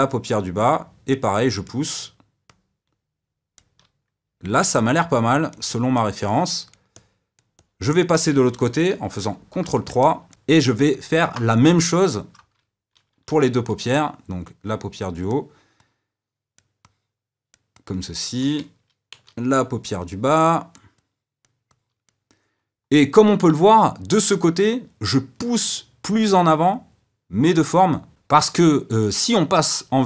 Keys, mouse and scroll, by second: 0.1-4.7 drag, 4.7-9.2 middle drag, 9.2 ctrl+KP_3, 10.0-13.4 shift+middle drag, 13.4 d, 14.4-19.4 drag, 19.4 d, 20.1-30.0 drag.